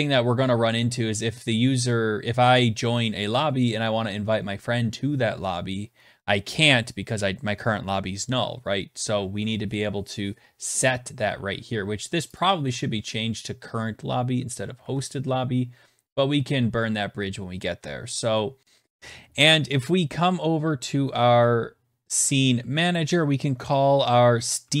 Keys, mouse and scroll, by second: 11.9 click, 12.1 click, 14.4 ctrl+s, 19.0 alt+Tab, 21.7 click, 23.9-24.8 typing.